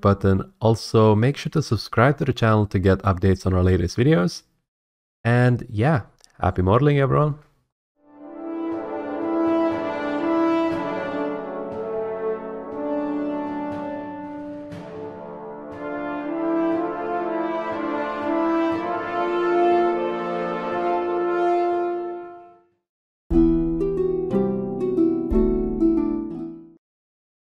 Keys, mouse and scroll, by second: 1.4 click, 1.7 middle click, 1.9 middle click, 2.8 click, 3.2 middle click, 3.6 middle click, 3.7 middle click, 4.4 r, 4.6 scroll, 6.4 click, 6.7 r, 6.8 z, 7.8 click, 8.2 click.